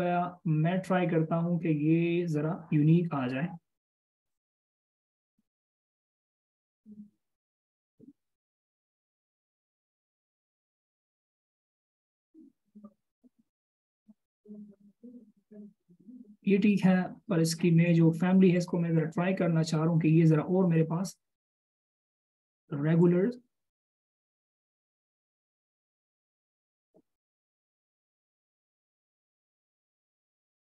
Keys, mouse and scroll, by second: 2.6 double click, 19.3 double click.